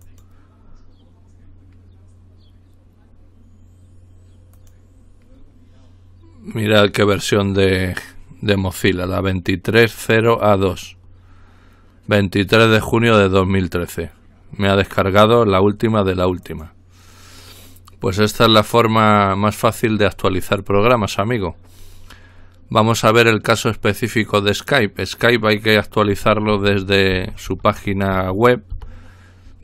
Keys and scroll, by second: 26.5-28.7 typing.